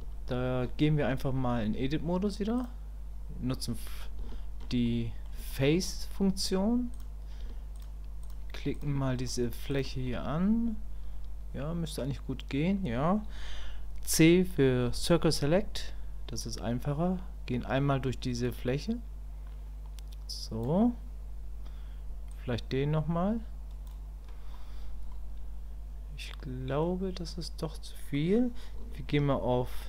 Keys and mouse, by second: 2.6-4.2 drag, 4.3 shift+click, 4.9 middle click, 5.5 shift+click, 6.2 middle click, 8.2 shift+click, 8.7 shift+click, 9.2 shift+click, 9.7 shift+click, 10.1-12.0 middle drag, 25.1-26.8 middle drag.